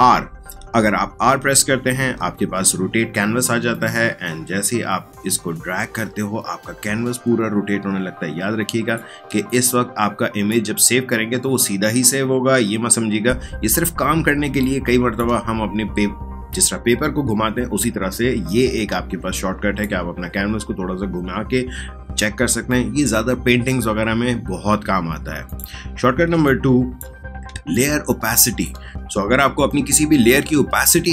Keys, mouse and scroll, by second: 1.3 r, 3.7-9.3 drag, 9.3 space, 9.5 click, 9.8 space, 14.4 space, 14.6 click, 15.0 space, 18.1 space, 18.4 click, 18.6 space, 25.4 click, 26.2 space, 26.4 click, 26.7 space, 27.4 space, 27.7 click, 28.0 space, 28.9 click, 29.6 space, 29.9 click, 30.2 space.